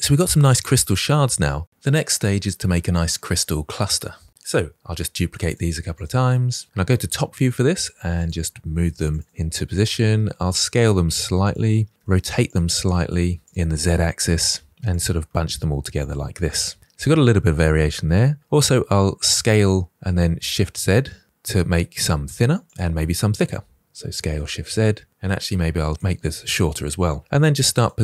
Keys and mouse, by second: 4.8 shift+d, 5.2 shift+d, 6.0 click, 6.2 shift+d, 6.6 ctrl+z, 7.3-12.3 typing, 7.9 drag, 10.9 click, 13.3-16.1 typing, 15.5 click, 16.5-17.1 middle drag, 17.7 s, 19.7 z, 20.8 shift+z, 23.4 f, 23.6 shift+s, 23.7 shift+z, 25.1 s, 25.3 z, 26.1-27.0 drag, 27.2-28.0 typing, 27.5 click, 27.7 drag.